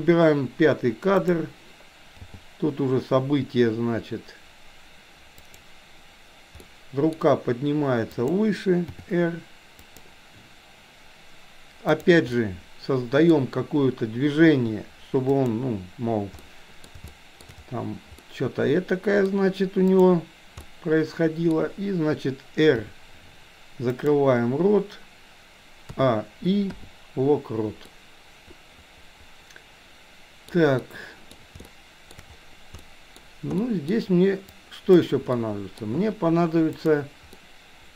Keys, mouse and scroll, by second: 2.2 g, 6.6 middle click, 8.1 click, 8.9 r, 12.0 click, 12.4-13.4 middle drag, 14.5 r, 16.5-16.9 middle drag, 17.1-17.5 shift+middle drag, 18.2-19.4 middle drag, 20.7-21.6 middle drag, 22.9 r, 26.0 a, 26.7 i, 28.0-30.5 middle drag, 30.9-31.4 middle drag, 31.7 shift+middle click, 32.9 middle click, 33.7 middle click, 34.6 click, 35.5 middle click, 36.7 click, 37.4-37.9 middle drag.